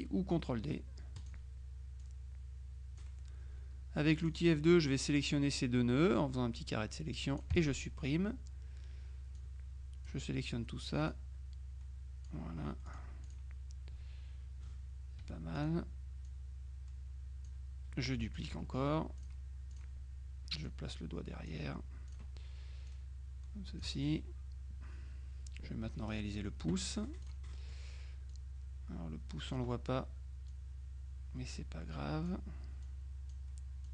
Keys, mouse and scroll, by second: 1.3 click, 2.1-3.5 drag, 4.3 click, 7.6 Delete, 9.4 click, 11.2-12.8 drag, 13.0 click, 15.3 F1, 15.6 click, 16.3-18.0 drag, 18.3 click, 19.3 click, 20.7-22.1 drag, 22.1 click, 22.9 click, 27.3-28.3 drag, 27.6 right click, 28.4-30.1 drag, 30.6-32.9 drag, 32.9-33.9 drag.